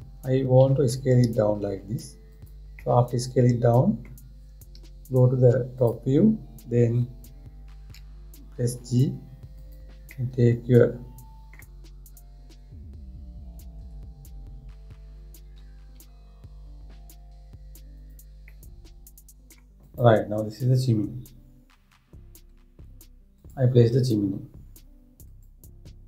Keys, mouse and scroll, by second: 1.2 s, 3.4-5.4 middle drag, 5.4 `, 8.6 g, 10.8-13.9 middle drag, 14.5 KP_1, 16.2 g, 19.1-20.5 middle drag, 20.5 click, 25.9 click.